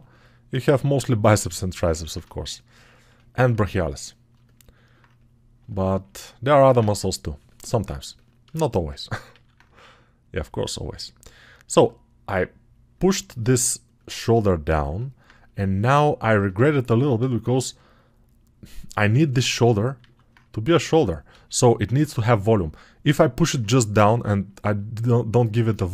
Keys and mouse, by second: 9.4 alt+q.